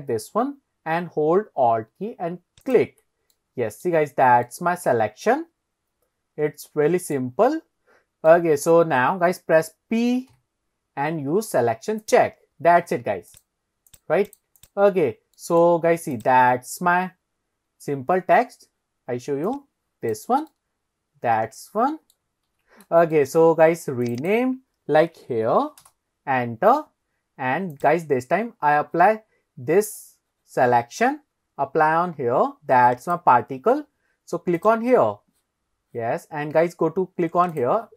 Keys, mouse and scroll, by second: 2.7 alt+click, 3.4 middle click, 4.1 scroll down 1, 4.5-7.2 middle drag, 7.6 scroll up 1, 8.3 scroll up 1, 8.3 middle click, 10.4 p, 13.3 click, 13.9 click, 14.6 click, 15.0 scroll down 1, 15.4 middle drag, 16.2 click, 17.8 scroll up 1, 18.6-19.0 scroll down 1, 19.5 click, 20.5-22.2 middle drag, 22.5 ctrl+z, 23.2 shift+middle click, 24.1 click, 24.2 click, 27.7 click, 29.5-30.3 scroll up 1, 33.1 click, 34.6 click, 35.8 scroll down 1, 37.6 click.